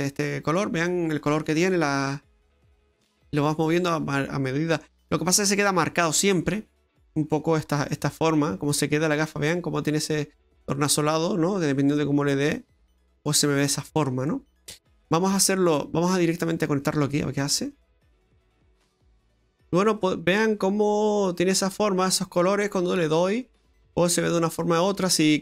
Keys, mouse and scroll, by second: 0.2 middle click, 1.3-3.1 scroll down 7, 3.1 middle click, 5.1-6.1 scroll up 5, 6.6 scroll up 1, 7.4-9.1 scroll up 7, 7.9 middle click, 13.8-14.3 scroll down 4, 14.3 middle click, 15.8 click.